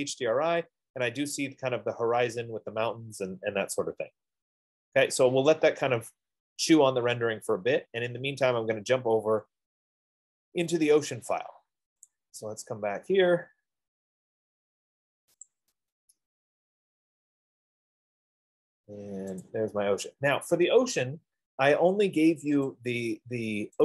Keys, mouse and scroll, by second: 7.3 F15, 12.5 click, 15.8 click, 19.9 click, 23.2 click.